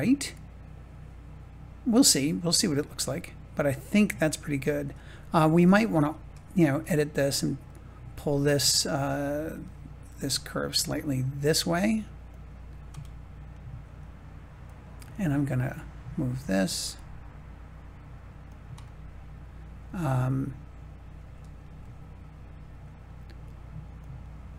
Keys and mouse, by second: 4.7 Tab, 7.6-10.5 middle drag, 10.7 g, 12.2 click, 13.0 middle click, 14.6 click, 15.2 middle click, 16.6 g, 18.4 click, 18.9-20.2 middle drag, 21.8-22.8 middle drag, 23.9 click.